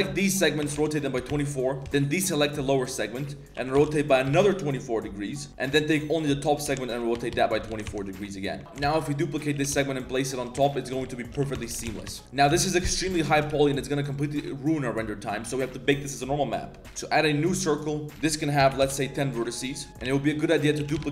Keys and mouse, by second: 0.6 r, 1.8 ctrl+z, 1.8 c, 3.0 click, 3.5 r, 5.3 click, 6.2 click, 6.5 r, 7.7-9.5 typing, 7.8 Tab, 7.9 drag, 8.1 middle click, 10.7 shift+click, 11.3 ctrl+j, 11.5 Tab, 11.7-13.7 typing, 12.0 Tab, 12.2 ctrl+z, 12.2 click, 13.7 drag, 14.0 click, 14.3-15.3 middle drag, 16.6 middle drag, 18.1 click, 19.7 middle click, 19.9 Tab, 19.9-21.1 typing.